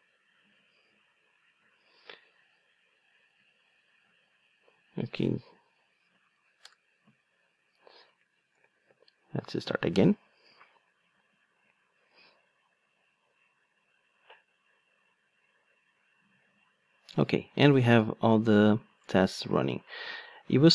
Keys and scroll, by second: 8.6 ctrl+d.